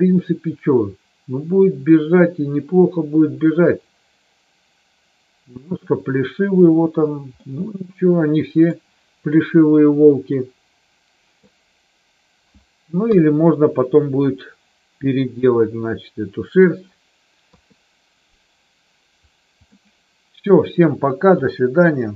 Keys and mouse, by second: 7.3-8.8 middle drag, 9.3-11.4 middle drag, 13.0 KP_1, 17.4 KP_3, 19.5 middle click, 21.8 middle click.